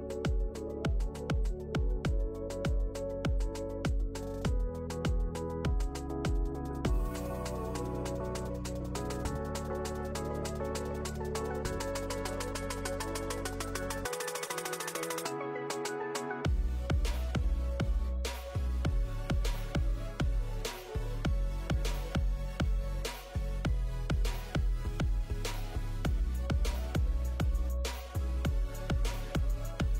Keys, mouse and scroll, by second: 3.5 click, 4.1 click, 4.4 middle click, 5.3 click, 5.4-6.0 scroll up 2, 5.7 click, 6.0 click, 7.2 middle click, 8.0 middle click, 8.4 click, 9.4 middle click, 9.8 click, 10.3 click, 11.3 shift+middle click, 11.6 middle click, 11.9 scroll up 1, 12.2 middle click, 12.2 scroll down 3, 12.3-12.6 scroll up 1, 12.7 click, 13.2 click, 15.4 click, 16.4 click, 18.0 click, 18.6-19.1 scroll down 5, 18.9 click, 19.1 click, 20.8 click, 21.2 click, 22.3 click, 23.3 middle click, 24.7 click, 25.5 middle click, 25.5-26.2 scroll up 1, 26.4 click, 26.8 click, 28.1 click, 29.0 scroll up 1, 29.1 scroll down 1, 29.3-29.9 scroll down 8, 29.4 middle click.